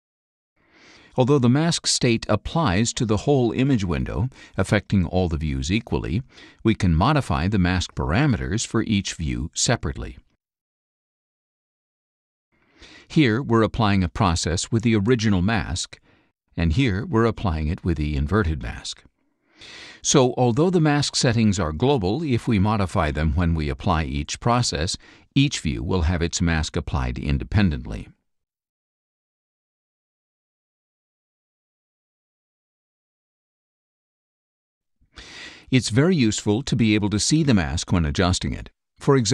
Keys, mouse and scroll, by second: 0.0 click, 9.2 click, 10.1 click, 10.9 click, 13.2 click, 16.7 click.